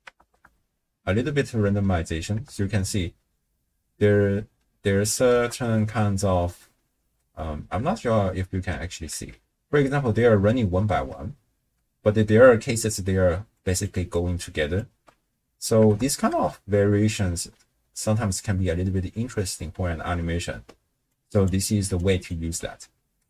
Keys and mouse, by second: 0.2 shift+space, 2.5 shift+space, 3.3 space, 5.3 shift+space, 7.8 shift+space, 9.1 shift+space, 9.8 space, 11.0-14.9 typing, 13.7 click, 14.1 click, 14.6 click, 16.0 shift+space, 18.0 space, 21.1 click, 22.0 click.